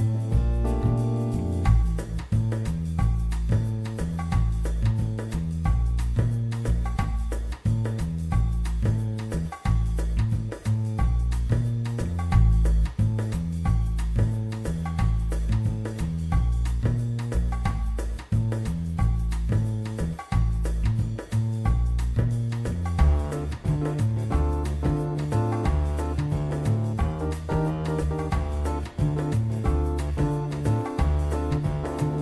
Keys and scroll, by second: 7.5 3, 7.6 Return, 7.6 4, 10.8 w, 16.6 t, 16.8 a, 17.0 r, 17.2 Return, 23.6 t, 24.1 w, 24.8 r, 27.7 w, 29.4 z, 30.0 e.